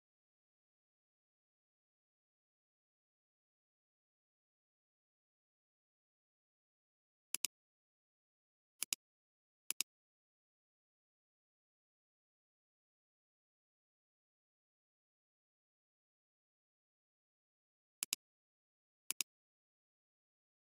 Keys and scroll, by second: 7.3 alt+space.